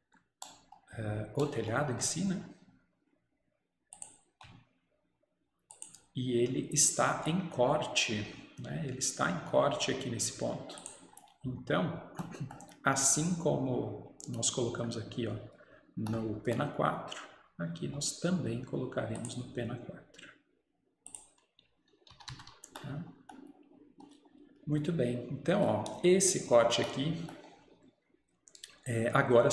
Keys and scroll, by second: 22.2 Escape, 22.3 Escape.